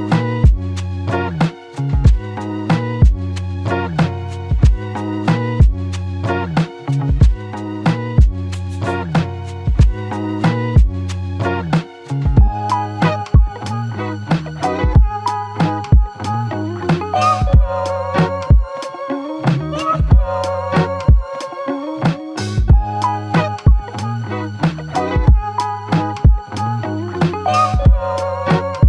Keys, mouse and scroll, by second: 0.0 ctrl+alt+click, 9.1 typing, 10.4 typing, 15.3 ctrl+click, 16.6 ctrl+click, 20.1 double click, 26.0 alt+click.